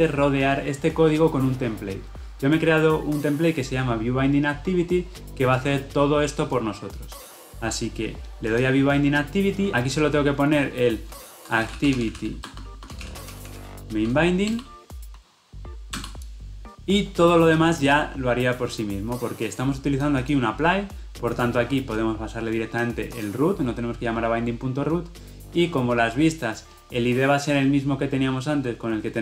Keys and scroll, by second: 14.6 Return.